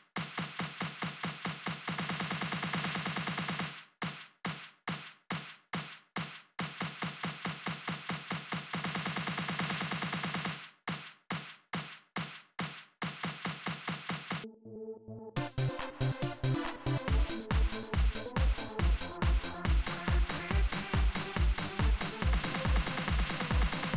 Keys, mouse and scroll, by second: 0.5 click, 3.1 click, 9.7 click, 11.2 click, 14.1 click, 15.1 click.